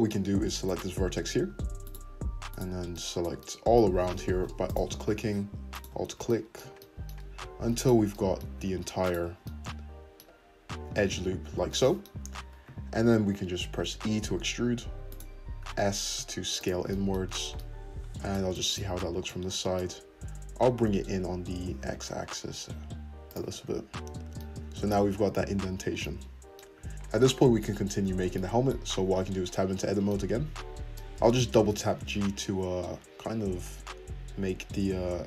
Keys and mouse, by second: 0.6 shift+click, 1.8 shift+click, 2.5 shift+click, 4.6 alt+shift+click, 5.7 alt+shift+click, 6.6-7.7 middle drag, 7.7 alt+shift+click, 7.8-9.0 alt+shift+middle drag, 9.0 alt+shift+click, 9.2-12.6 middle drag, 12.2 `, 12.6 shift+click, 12.9-14.4 middle drag, 13.9 e, 14.4 shift+click, 15.0 middle click, 15.0 `, 15.6 s, 20.6 g, 23.5 `, 25.1 `, 25.7 Tab, 25.7 click, 26.0 middle click, 26.7 `, 27.3 `, 29.0 Tab, 29.8 1, 31.5 g, 33.2-35.2 shift+drag.